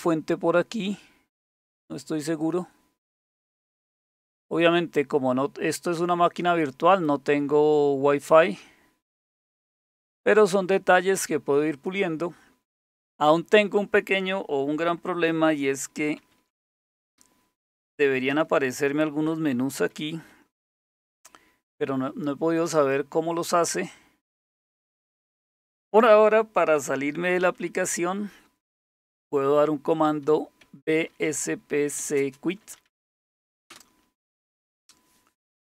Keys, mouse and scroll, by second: 11.7 click, 13.1 click, 16.2 super+d, 18.3 super+x, 19.9 super+d, 20.7 super+x, 23.5 click, 24.6 click, 27.6 super+1, 30.4-33.6 typing, 33.7 Return.